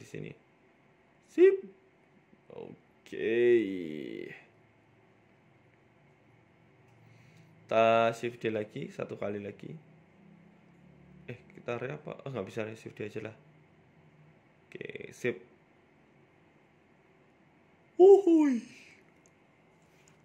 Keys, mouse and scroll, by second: 0.0 KP_1, 0.4-0.8 scroll down 3, 0.7 shift+middle click, 1.1 g, 3.9 right click, 4.4 KP_3, 5.2 g, 6.7 z, 7.2 middle click, 8.2 z, 9.4 shift+right click, 9.9 KP_3, 10.1 KP_1, 12.5 click, 14.7 shift+d, 16.2-17.2 scroll down 9, 17.1-17.7 scroll up 8, 17.6 shift+middle click, 18.0 scroll down 1, 18.3 middle click, 19.2 scroll down 1, 19.6 click.